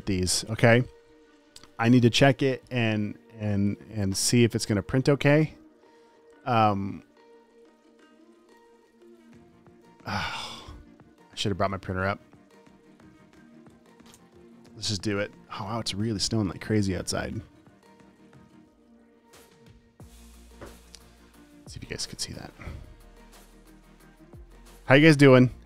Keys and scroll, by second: 1.1 super+s.